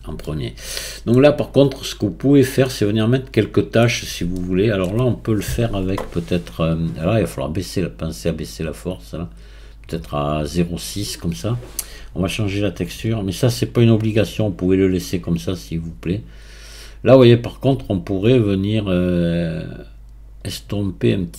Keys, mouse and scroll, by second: 0.2-1.1 scroll down 2, 1.1-7.7 shift+middle drag, 7.7-16.1 drag, 16.1-19.4 right drag.